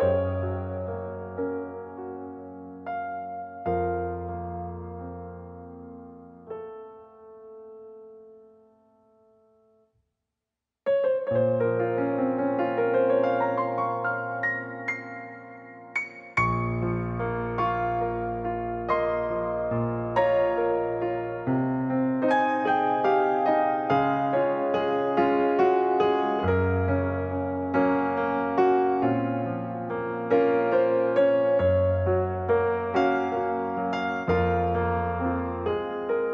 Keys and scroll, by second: 11.8-12.7 typing, 14.1 typing, 19.8-20.2 typing.